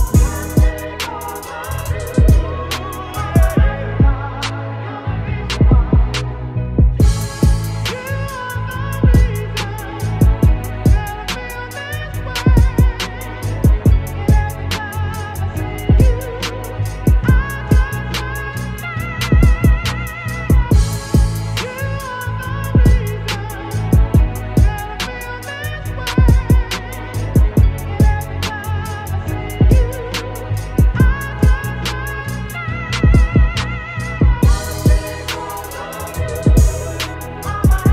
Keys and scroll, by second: 16.9 ctrl+t, 19.2 Return, 19.9 space, 25.9 b, 26.5 ctrl+BackSpace, 27.3 ], 28.4 x, 29.2 ctrl+z, 35.1 ctrl+shift+g, 35.8 ctrl+t, 36.8 ctrl+=.